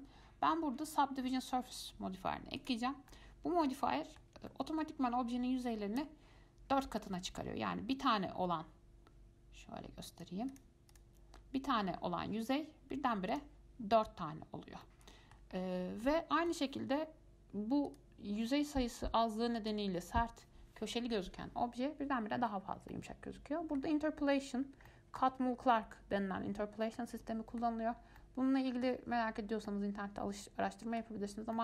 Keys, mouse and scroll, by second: 3.3-10.3 middle drag, 10.3 click, 10.7 click, 11.1 click, 13.5 click, 15.0-15.8 middle drag, 15.8 scroll up 2, 16.2-18.1 middle drag, 18.1 click, 19.8 click, 23.1-28.2 middle drag, 28.2 scroll down 2, 28.4-29.5 middle drag, 29.5-29.9 scroll up 1, 29.9-31.5 middle drag, 31.5 scroll down 2.